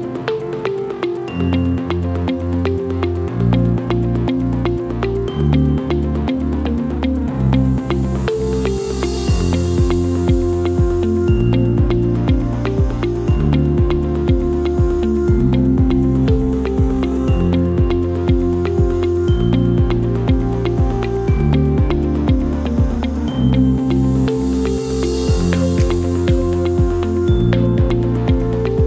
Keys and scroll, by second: 10.6 ctrl+g, 25.8 KP_2, 25.8 KP_0, 25.9 Return.